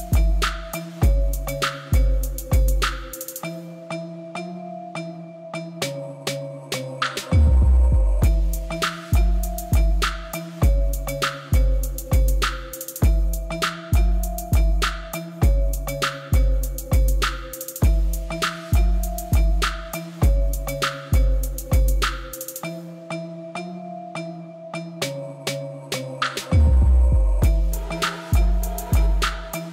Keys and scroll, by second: 7.4 g, 7.6 y, 9.8 alt+a, 22.1 alt+a.